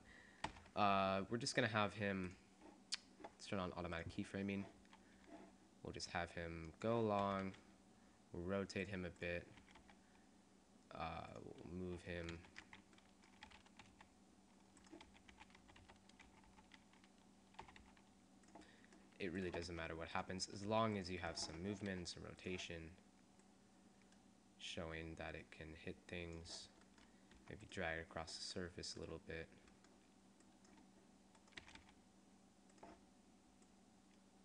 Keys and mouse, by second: 0.7 i, 3.9 click, 5.7 click, 6.3 right click, 7.5 r, 9.7 r, 11.5-12.5 drag, 12.5 ctrl+z, 13.7 r, 15.2 r, 19.4 click, 19.8 r, 20.4 click, 20.4 right click, 20.8 g, 22.0 r, 27.4 click, 27.4 g, 29.6-31.0 drag, 31.6 r, 32.5 click.